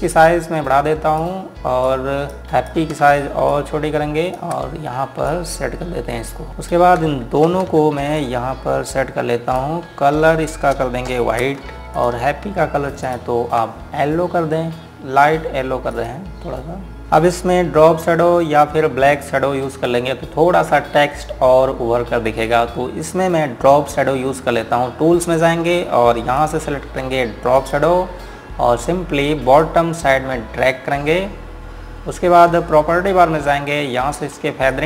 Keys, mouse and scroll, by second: 1.0 click, 5.5-6.1 scroll up 1, 6.1 click, 6.5-6.8 scroll down 1, 6.8 click, 8.2 g, 8.9 click, 11.2 scroll up 1, 11.7 Page_Up, 12.3 click, 13.5 ctrl+click, 16.7 click, 17.3 scroll up 1, 20.3 click, 27.0 click.